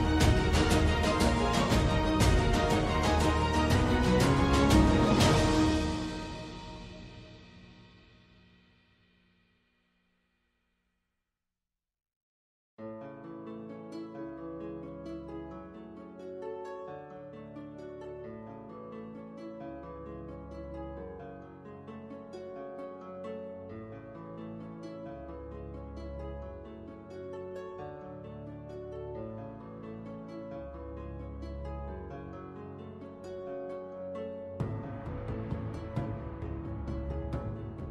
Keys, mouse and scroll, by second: 0.2 f, 2.0 Tab, 2.4 alt+click, 3.4 z, 4.2 2, 4.9 click, 5.2 click, 6.1 ctrl+f, 7.3 ctrl+z, 7.6 2, 8.5 shift+click, 9.1 ctrl+f, 12.1 space, 13.3 click, 14.2 n, 14.8 click, 15.3 n, 16.0 click, 18.1 n, 19.3 n, 20.0 click, 22.1 F1, 24.8 click, 26.7 F2, 27.2 click, 29.1-31.9 right drag, 31.9 F3, 34.2 F3, 35.3 F5.